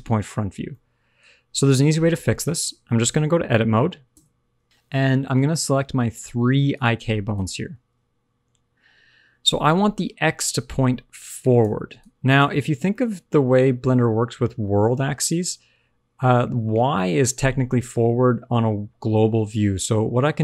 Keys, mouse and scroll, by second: 0.6 middle click, 4.1 Tab, 4.6 super+z, 4.6 click, 5.3 click, 6.0 shift+click, 6.7 shift+click, 7.3 click, 9.4 scroll down 1, 9.6 shift+middle click, 10.3 scroll down 1, 10.8-12.4 typing, 11.2 click, 11.9 click, 12.8 middle click, 15.5-15.8 scroll down 1, 16.8 d.